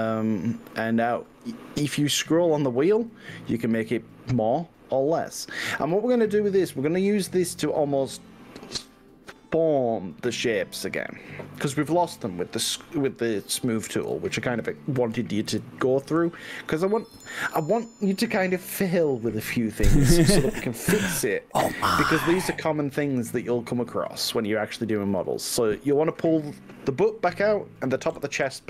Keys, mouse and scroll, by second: 0.7 scroll down 2, 2.1-2.5 scroll up 3, 5.7 scroll up 1, 13.6 click, 14.3 ctrl+z, 14.4 middle click, 15.5 KP_1, 17.2 KP_3, 24.4 g, 28.3 x.